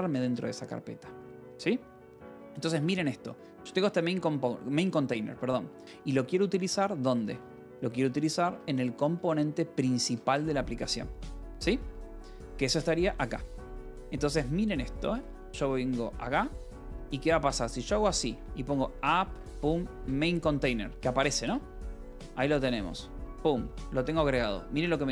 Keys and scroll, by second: 2.7 k, 2.8 Return, 3.2 j, 4.0 k, 5.2 :, 6.4 j, 6.9 k, 7.9 Return, 8.1-11.6 typing, 12.4 Return, 12.9-15.0 typing, 15.9 Return, 17.0-20.6 typing, 21.3 Return, 21.9 Escape, 22.3 a, 23.3 shift+., 23.3 Escape, 24.4 ctrl+s.